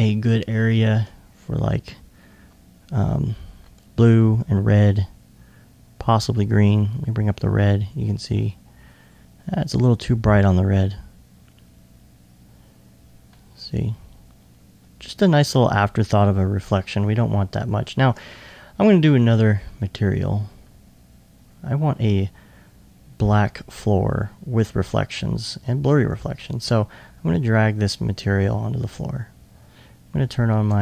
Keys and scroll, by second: 1.4 ctrl+0.